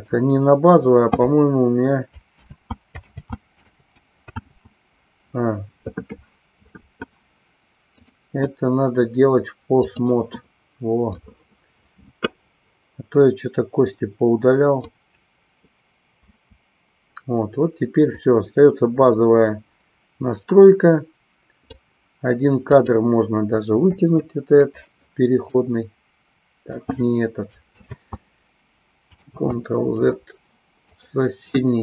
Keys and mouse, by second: 0.0 click, 2.6 ctrl+z, 4.5 ctrl+z, 8.0-10.1 drag, 11.0-14.9 drag, 16.2 Delete, 18.2-21.8 drag, 22.8 click, 24.0 Delete, 25.6-26.9 drag, 27.9 ctrl+z, 29.3 ctrl+z.